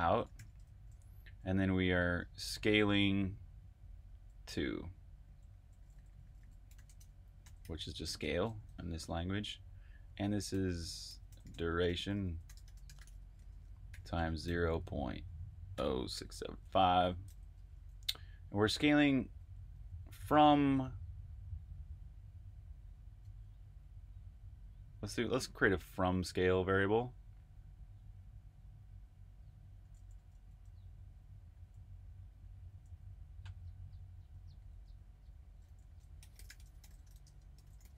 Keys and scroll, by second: 0.0-1.2 typing, 3.9-8.6 typing, 9.7-12.0 typing, 15.4-18.1 typing, 19.3-20.1 typing, 24.4-26.6 typing, 29.5-35.8 typing, 37.6-37.9 typing.